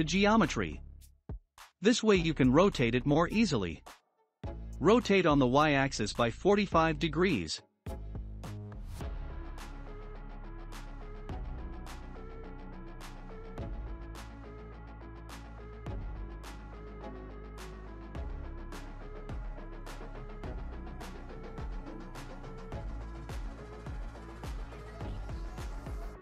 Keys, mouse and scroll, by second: 1.0 r, 5.3 r, 10.8-11.4 scroll up 1, 11.8 s, 19.0-20.8 middle drag, 20.8-23.7 drag, 24.4-24.8 scroll up 2, 24.8-26.2 middle drag.